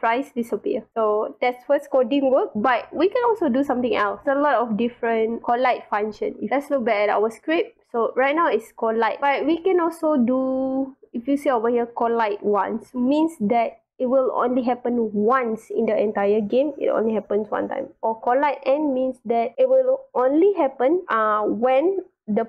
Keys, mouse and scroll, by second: 3.9 click, 9.3 scroll down 2, 10.4 scroll up 2, 11.1 scroll down 2.